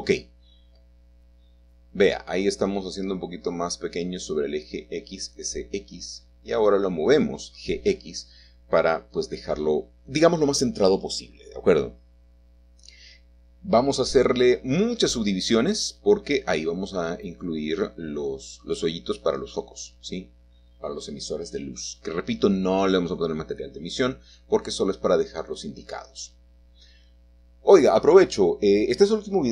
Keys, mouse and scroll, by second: 0.8 s, 1.9 typing, 3.8 shift+middle click, 4.0 shift+click, 4.8-5.4 typing, 9.8-11.0 shift+middle drag, 9.9 shift+click, 11.0-11.4 scroll up 1, 11.4 typing, 11.9-12.7 scroll down 1, 13.1-14.8 middle drag, 13.1 scroll down 1, 13.2 right click, 14.0 click, 16.2 click, 17.6 click, 19.7 2, 21.4-25.5 middle drag, 22.4-22.9 scroll up 2, 22.9-24.9 scroll down 2, 25.9-27.0 drag, 28.4 shift+middle click, 28.5 shift+click.